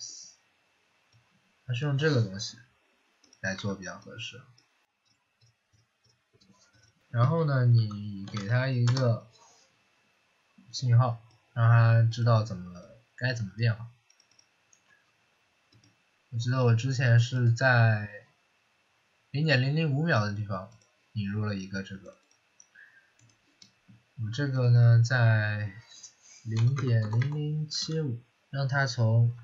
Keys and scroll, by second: 3.5 Delete, 7.4-8.7 typing, 8.8 Return, 26.2-29.4 typing.